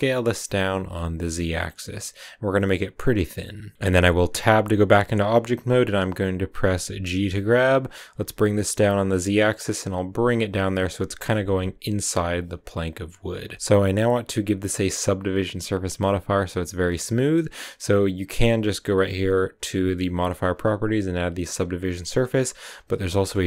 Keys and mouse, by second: 3.5 click, 4.4 Tab, 7.0 g, 8.0 z, 10.6 click, 16.9 click, 20.1 click, 22.0 click, 23.2 shift+click.